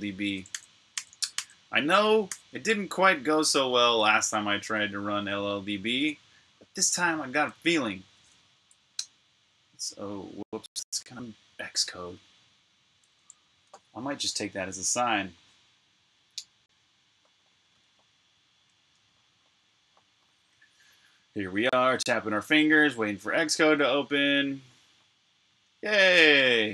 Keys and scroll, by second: 0.4 super+j, 2.1 super+k, 3.2 super+j, 5.4-7.2 typing, 8.9 super+\, 21.1 Escape, 21.3 typing, 22.4 typing.